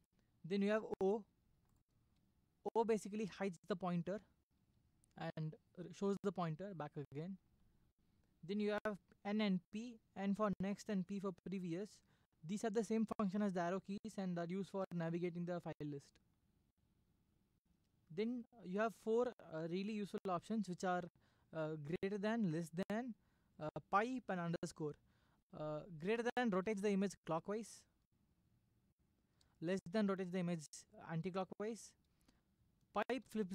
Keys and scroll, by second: 2.1 o, 4.5 o, 26.5 >, 29.7 typing, 33.2 Down.